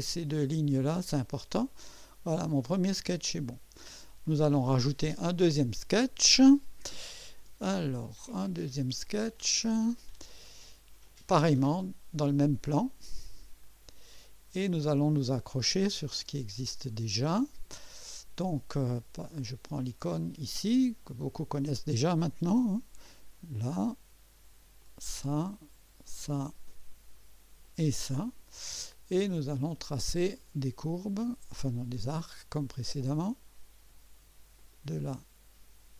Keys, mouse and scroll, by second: 1.9 click, 9.3 click, 11.0 click, 13.6 click, 15.1 scroll up 1, 15.7-16.1 right drag, 16.4 scroll up 1, 17.1-17.7 right drag, 21.0 click, 23.0 click, 24.8 click, 26.0 click, 27.6 click, 30.3 click, 31.9 click, 34.6 click.